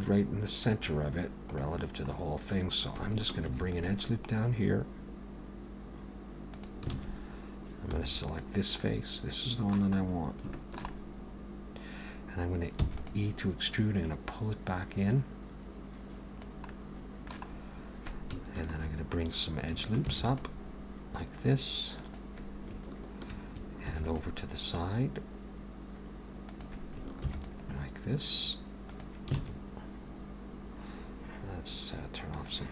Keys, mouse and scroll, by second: 3.5 ctrl+r, 7.0 alt+a, 8.0 3, 8.3 click, 8.8 middle click, 10.0-10.5 scroll up 3, 10.6 shift+middle click, 10.9 middle click, 11.8 click, 11.8 middle click, 12.8 e, 13.8 click, 16.7 middle click, 17.6 scroll up 1, 20.0 ctrl+r, 23.9 ctrl+r, 27.2 ctrl+r, 29.4 alt+a, 32.4 click.